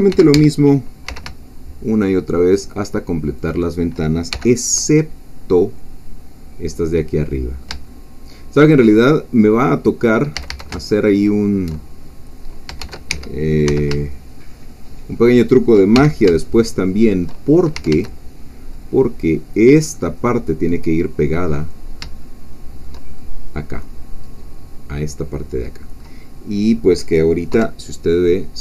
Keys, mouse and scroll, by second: 0.1 shift+d, 0.3 Escape, 1.1 s, 3.4 shift+click, 4.3 shift+f, 5.2-9.3 middle drag, 5.2-5.6 scroll down 2, 9.3 scroll down 2, 9.4-10.3 scroll up 2, 10.3-10.7 scroll up 1, 10.3 a, 11.1 alt+shift+click, 12.8 shift+d, 13.1 Escape, 13.7 shift+s, 15.4 shift+click, 15.9 shift+f, 16.4-17.4 shift+middle drag, 17.7 shift+a, 18.7-20.7 middle drag, 20.7 scroll down 2, 21.1 click, 22.0 shift+middle click, 23.2 shift+middle click, 23.8-25.2 scroll down 2, 25.2-26.2 middle drag, 26.2-27.5 scroll down 2, 27.5 KP_3.